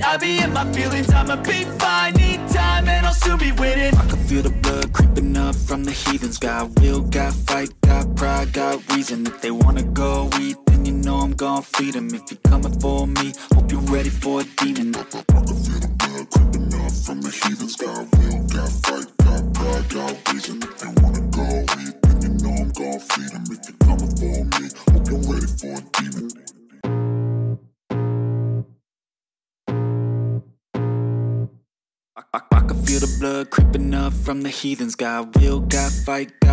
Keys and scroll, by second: 24.0 v.